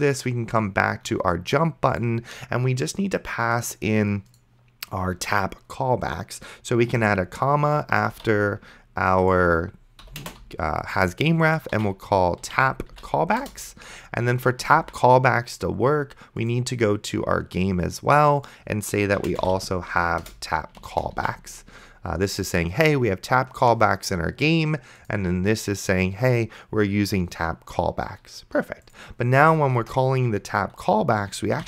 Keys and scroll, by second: 7.3 ,, 8.4 ctrl+z, 10.0 ,, 10.2 space, 11.8-13.4 typing, 15.0 ctrl+s, 19.2-20.3 typing, 21.4 ctrl+s, 29.9 Return, 31.3-31.6 typing.